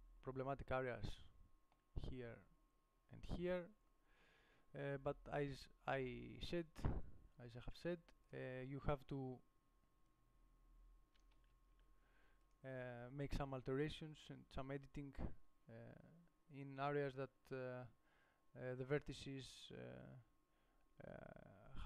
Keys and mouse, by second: 11.8 ctrl+z.